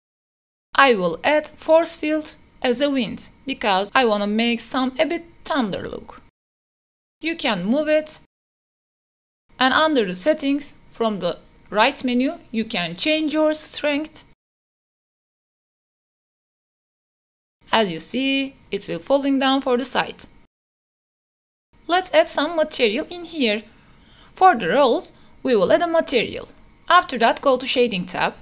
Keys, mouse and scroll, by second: 0.1 middle click, 0.5 shift+middle click, 0.6 middle drag, 0.7 shift+s, 1.2 shift+a, 4.5 middle click, 5.3 g, 5.7 z, 6.7 r, 8.3-9.8 typing, 12.1 space, 14.4 click, 15.6-16.7 drag, 17.4 space, 22.1 shift+middle click, 22.5-24.9 middle drag, 24.9-26.1 drag, 26.1-28.4 middle drag.